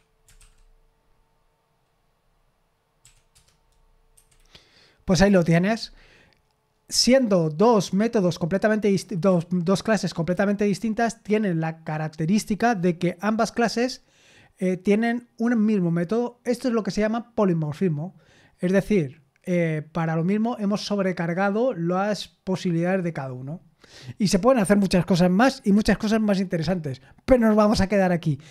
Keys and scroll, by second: 0.0-0.9 typing.